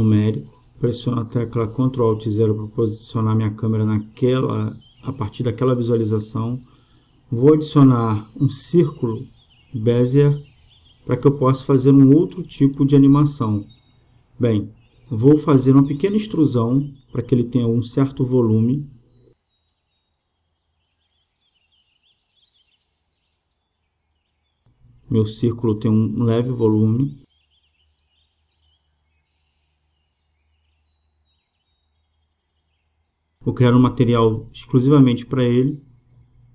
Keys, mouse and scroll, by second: 2.5 ctrl+alt+KP_0, 7.4-10.3 drag, 10.8 space, 17.8-20.2 middle drag, 21.2-22.9 drag, 25.7-28.1 drag, 27.8-34.5 middle drag, 34.5-36.5 drag.